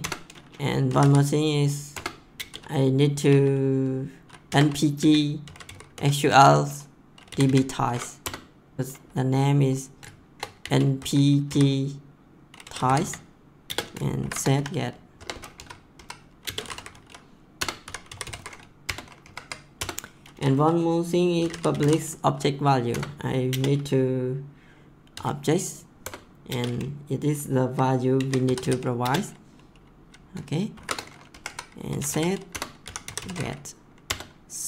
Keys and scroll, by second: 0.0 Return, 0.6-3.2 typing, 1.9 Return, 4.4-8.8 typing, 8.1 Return, 10.3-15.1 typing, 15.5 Left, 16.3-18.8 typing, 17.5 Return, 19.2 Right, 19.7 Return, 21.2-23.4 typing, 22.9 Return, 25.1 o, 26.0 Return, 26.4 space, 27.9-29.2 typing, 30.7-34.6 typing, 31.3 Left, 34.0 Return.